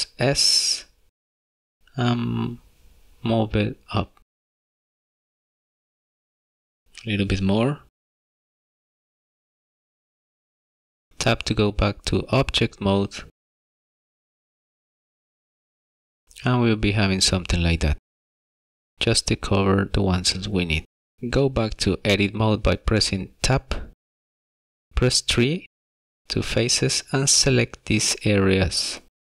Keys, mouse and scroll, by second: 4.2 middle click, 4.9 scroll down 2, 5.1 middle click, 5.6 middle click, 7.2 s, 10.5 middle click, 11.5 Tab, 12.0 middle click, 20.3 Tab, 27.2 middle click, 28.7 click.